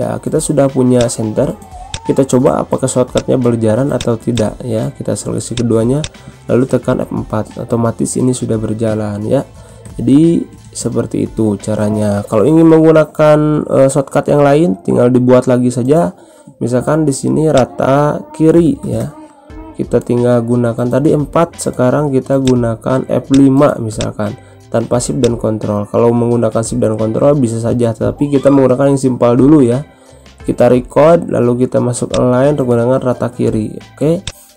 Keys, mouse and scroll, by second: 8.6 F4, 11.1 ctrl+F4, 11.2 ctrl+z, 17.5 click, 19.9-21.0 typing, 22.4 click, 32.1 click, 34.2 click.